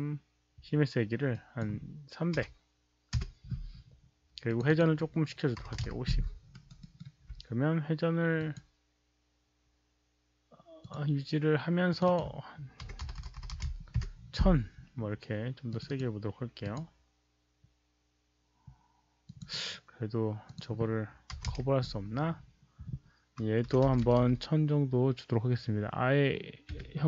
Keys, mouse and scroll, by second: 1.3 alt+click, 2.3 KP_3, 3.8 Return, 4.4 Return, 4.4 ctrl+a, 4.4 click, 4.4 KP_3, 4.6 click, 5.5 Return, 5.5 ctrl+a, 5.5 click, 5.5 KP_5, 5.5 KP_3, 6.4 alt+right click, 6.7 alt+middle click, 8.3 click, 10.8 click, 11.8 click, 11.9 Return, 11.9 alt+right click, 11.9 alt+middle click, 11.9-13.5 typing, 12.0 click, 13.3 alt+right click, 13.3 alt+middle click, 13.3 click, 14.0 alt+middle click, 15.2 alt+middle click, 15.6 click, 15.8 KP_1, 16.6 click, 16.7 Return, 16.7 KP_0, 16.7 KP_1, 19.2 click, 20.4 click, 21.4 Return, 21.4 click, 21.4 KP_0, 21.4 KP_1, 22.3 Return, 23.6 Return, 23.8 KP_0, 25.9 Return, 25.9 click, 25.9 KP_0, 25.9 KP_1, 26.6 Return, 26.6 click, 26.6 KP_0, 26.6 KP_1.